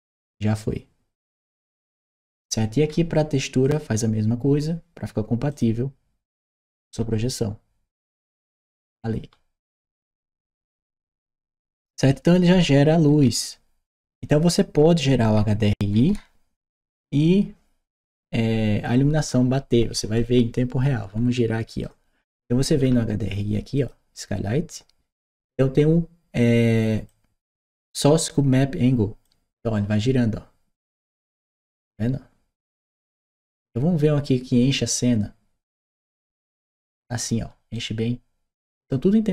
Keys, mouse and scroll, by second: 2.7 middle click, 3.5 click, 5.3 click, 6.4-10.2 right drag, 10.6-16.6 right drag, 12.9 a, 20.0-21.6 right drag, 23.6 click, 26.9 click, 29.0-37.1 drag, 37.6-38.7 right drag.